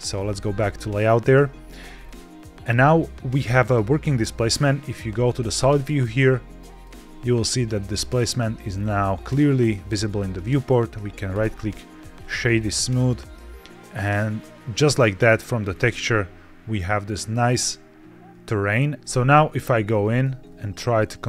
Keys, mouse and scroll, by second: 1.9 scroll up 1, 4.0 z, 5.9-6.8 middle drag, 6.8-7.3 scroll down 3, 7.3-7.8 middle drag, 7.9-8.5 scroll down 3, 8.5-8.9 scroll up 4, 9.2 middle click, 9.5-10.3 scroll up 1, 10.3-11.4 right drag, 12.1 scroll down 1, 12.4-14.1 middle drag, 14.1-14.7 scroll down 3, 14.7-15.5 middle drag, 15.6-17.4 scroll up 3, 19.0 ctrl+shift+Tab, 19.0 scroll down 2, 19.2 shift+middle click, 19.5 scroll down 1, 19.9 shift+middle click, 20.5 ctrl+Tab, 21.1 g.